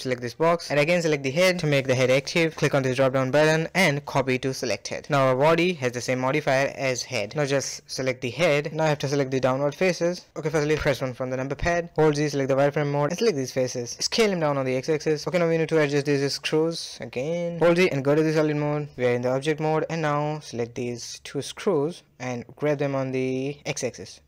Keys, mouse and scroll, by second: 0.5 shift+click, 1.7-3.8 drag, 3.8-5.4 middle drag, 5.4 scroll down 2, 5.7-6.0 middle drag, 6.0 KP_1, 6.4-8.2 middle drag, 8.2 click, 9.2 Tab, 9.2 middle click, 9.7 click, 10.1 shift+click, 10.7 shift+click, 11.1 KP_1, 11.4 z, 12.0 click, 13.1 s, 14.2 Tab, 14.5-15.0 scroll up 1, 15.0 click, 16.1 shift+drag, 17.2 z, 17.7-19.7 middle drag, 19.7 click, 19.9-20.4 middle drag, 20.4 click, 21.1 shift+click, 21.4-22.6 middle drag, 22.6 g.